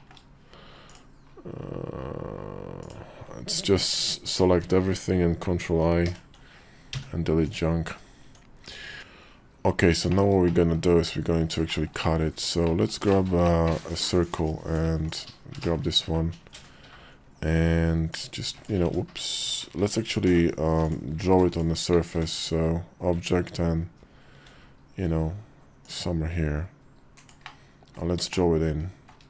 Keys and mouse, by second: 4.4 ctrl+l, 5.8 ctrl+i, 6.7 x, 8.0 Tab, 8.6 Tab, 9.0 x, 9.5 KP_5, 9.9 shift+middle click, 10.2 middle click, 10.8 KP_5, 11.4 shift+middle click, 11.8 middle click, 12.4 middle click, 12.9 middle click, 13.2 middle click, 14.1 click, 15.4 shift+middle click, 17.9 click, 18.4 middle click, 18.4 right click, 18.6 ctrl+z, 19.5 shift+v, 21.3 click, 21.7 alt+w, 21.9 shift+v, 25.6-29.2 drag.